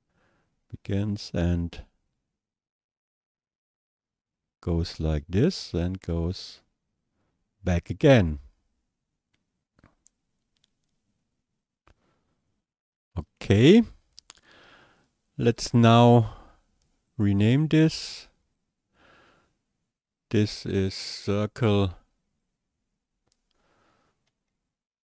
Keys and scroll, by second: 24.4-25.0 typing.